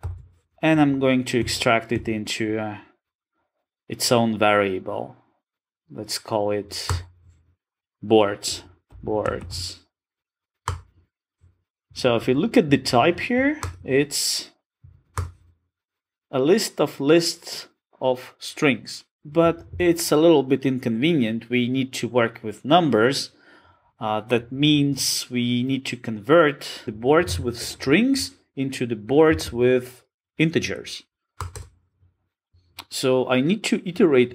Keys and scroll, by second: 0.0 alt+super+v, 13.6 alt+Return, 32.5 super+z.